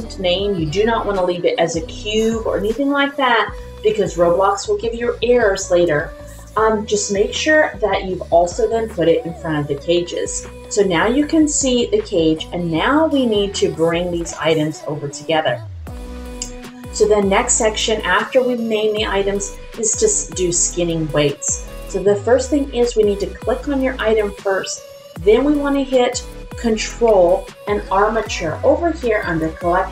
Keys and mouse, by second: 21.5 click, 23.4 click, 29.2 ctrl+click.